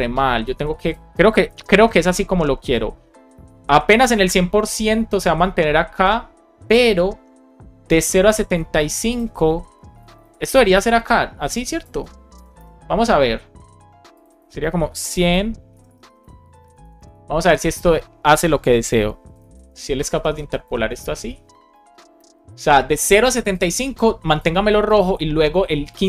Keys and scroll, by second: 0.5 super+c, 1.3 Return, 1.7 super+v, 3.0 BackSpace, 8.6 super+x, 9.8 space, 10.1 super+v, 12.2 BackSpace, 15.6 BackSpace, 16.5 Up, 17.2 Left, 17.7 space, 19.4 shift+5, 20.0 BackSpace, 20.5 shift+5, 21.0 super+s, 22.1 alt+shift+f, 22.6 super+s.